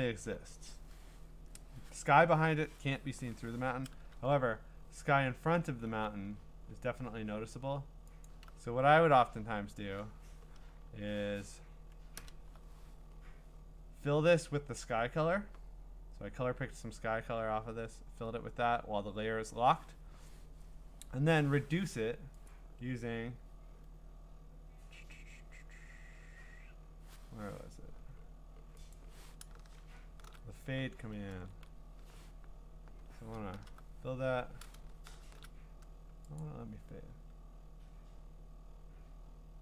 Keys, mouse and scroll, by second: 5.9 b, 8.3 alt+click, 12.2 alt+BackSpace, 22.5 click, 29.4 click, 29.8 ctrl+shift+f, 31.3 ctrl+z, 33.5 alt+BackSpace, 35.1 ctrl+shift+f, 36.4 click.